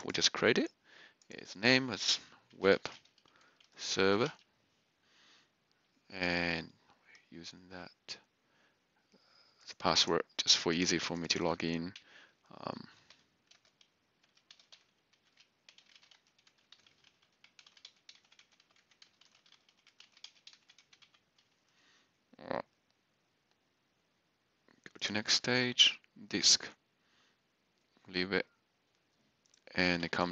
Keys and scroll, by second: 2.2-4.7 typing, 12.8-21.0 typing, 18.7 Tab.